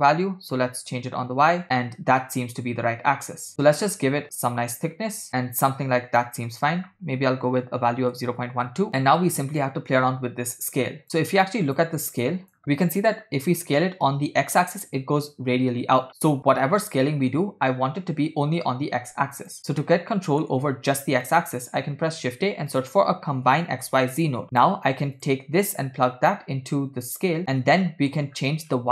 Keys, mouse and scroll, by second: 0.9-6.3 drag, 6.5-8.7 shift+drag, 9.0 scroll down 3, 9.6-11.0 shift+drag, 11.5 shift+click, 12.3 shift+click, 12.7-19.6 drag, 19.6 scroll down 3, 19.9 middle click, 21.4 middle click, 22.0 shift+a, 26.1-27.4 drag, 27.9 middle click, 28.5-28.9 scroll up 4.